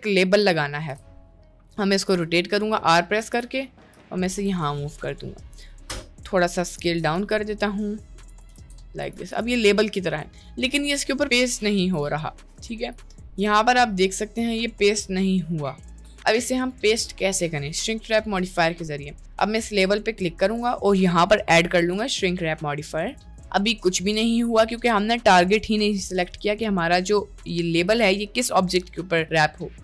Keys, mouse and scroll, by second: 0.9 r, 2.7 click, 3.3 g, 4.9 middle click, 6.8 click, 7.2 s, 8.5 s, 9.6 middle click, 10.9 click, 11.5 click, 18.6-19.2 middle drag, 19.6 middle click, 20.5-23.3 drag, 23.9 middle click, 27.9 click.